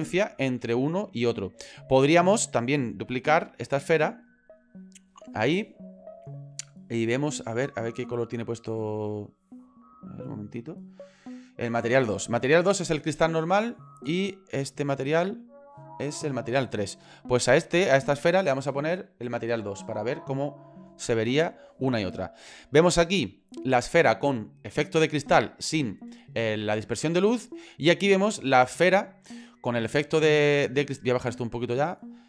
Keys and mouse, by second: 0.8 shift+middle click, 1.3 middle click, 3.1 shift+d, 6.2 middle click, 7.3 middle click, 7.9 middle click, 8.4 middle click, 8.9 click, 10.1 click, 17.8 click, 19.3 click, 31.7 click.